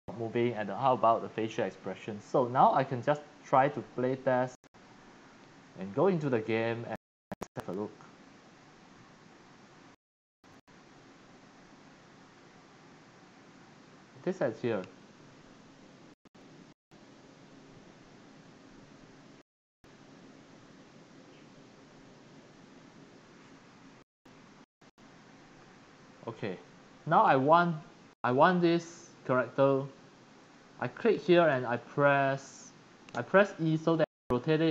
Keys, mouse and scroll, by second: 3.4 click, 3.7-5.7 drag, 6.5 click, 11.0-12.1 drag, 12.1-14.1 w, 14.1 d, 26.5 Escape, 30.5 click, 31.6 e.